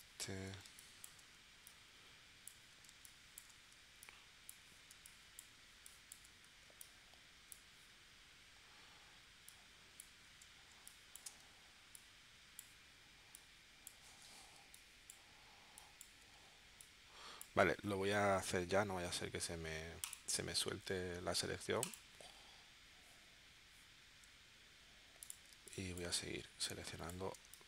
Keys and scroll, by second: 0.6 space, 2.9 space, 5.0 space, 10.7 space, 14.7 space, 25.5 space, 27.4 space.